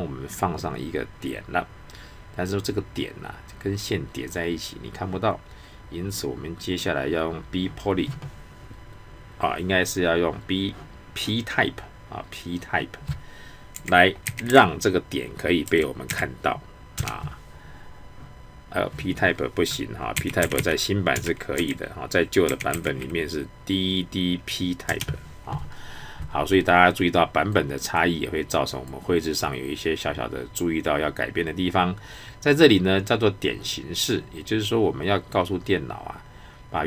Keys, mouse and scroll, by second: 13.7-14.5 typing, 15.6-16.1 typing, 16.9 Return, 20.1-22.7 typing, 24.8 Return, 27.5-31.3 drag.